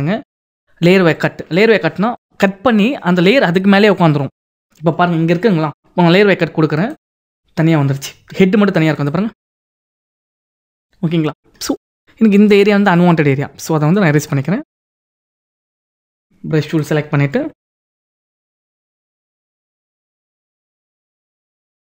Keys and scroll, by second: 18.9 [.